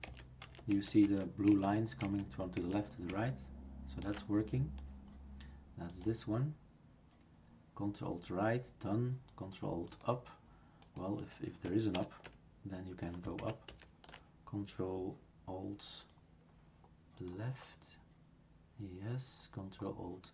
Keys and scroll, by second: 0.1 ctrl+alt+Right, 1.1 ctrl+alt+Left, 1.5 ctrl+alt+Right, 12.0 super+Return, 13.4 ctrl+alt+Up.